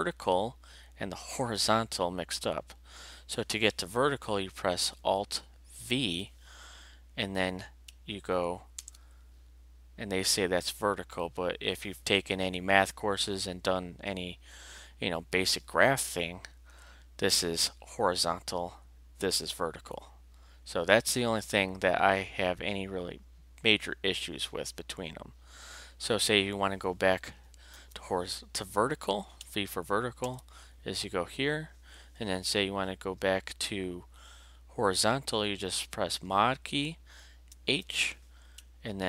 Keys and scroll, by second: 5.8 alt+v, 8.8 alt+Return, 27.7 alt+v, 30.2 alt+Return, 37.5 alt+h.